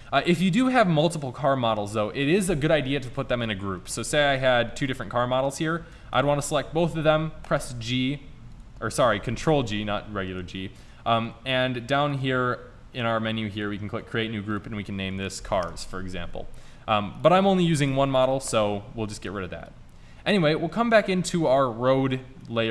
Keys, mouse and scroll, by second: 4.1 shift+d, 4.7 click, 7.5 g, 9.1 ctrl+z, 9.5 ctrl+g, 11.3-12.4 drag, 18.0 Delete, 18.0-21.8 right drag.